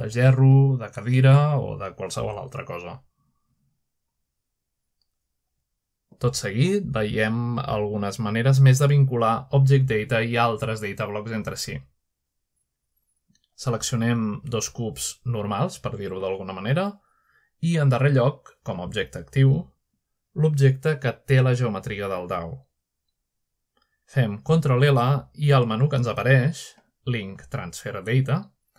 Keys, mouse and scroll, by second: 0.1 typing, 1.6 typing, 2.0-3.1 drag, 2.7-3.6 scroll down 1, 3.1 shift+middle drag, 3.6 middle drag, 4.0 shift+middle click, 4.8-5.2 middle drag, 5.5 shift+middle click, 5.9-6.9 shift+scroll up 1, 6.8-7.5 shift+middle drag, 8.0-10.4 middle drag, 8.0 typing, 10.4 scroll down 1, 12.0 typing, 13.2-14.0 middle drag, 14.9 shift+middle click, 15.4-16.6 shift+middle drag, 15.8-16.6 drag, 18.6-23.5 shift+drag, 23.5-25.7 shift+middle drag, 25.5-26.2 typing.